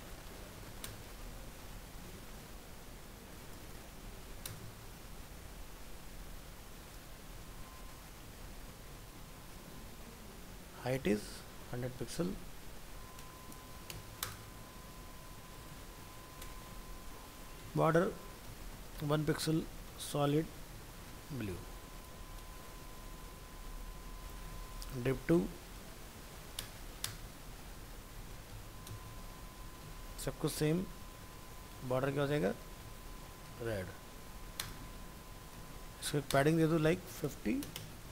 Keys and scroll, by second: 2.2 ctrl+s, 24.5 ctrl+c, 27.3 ctrl+v, 32.0 ctrl+shift+Left.